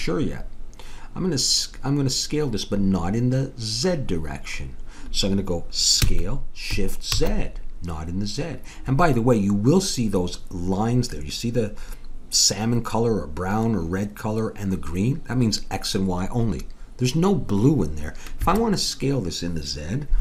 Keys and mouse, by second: 6.0 s.